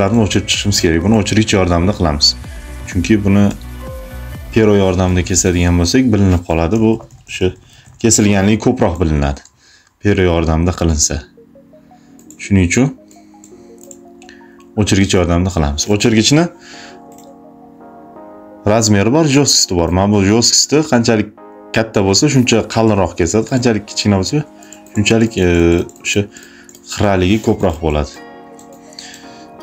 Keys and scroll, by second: 3.3 e, 6.5 ], 13.6 space, 14.9 space, 15.9 [, 23.6 ], 27.2 space.